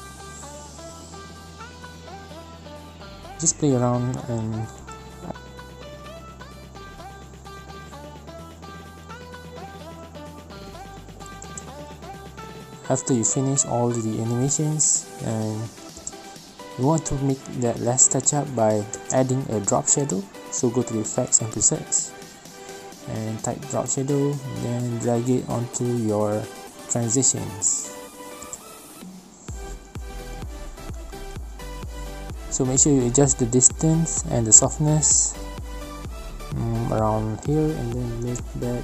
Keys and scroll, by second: 14.6 space, 19.0 space.